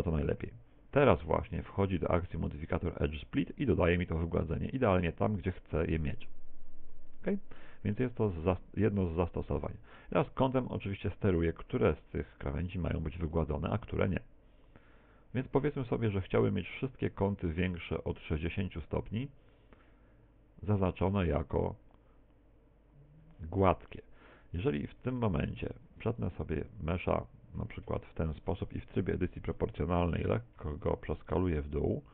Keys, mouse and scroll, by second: 1.4 click, 3.6 middle click, 8.0 middle click, 11.0 click, 24.0 middle click, 25.0 Tab, 26.0 ctrl+r, 27.7 click, 27.7 a, 28.1 alt+shift+right click, 29.3 o, 30.7 s.